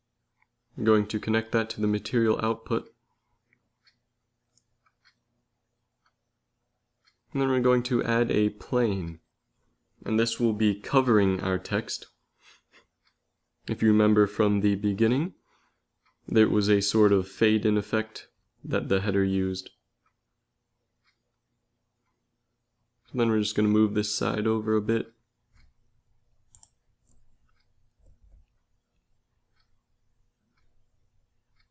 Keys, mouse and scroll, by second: 6.3 ctrl+s, 8.0 shift+a, 10.4 s, 13.0 g, 15.2 z, 15.6 click, 16.1 Tab, 16.7 a, 16.9 b, 17.5 click, 18.8 g, 21.5-23.0 drag, 23.4 middle click, 24.2 a, 24.5 b, 26.8 g, 30.0 a, 30.4 Tab.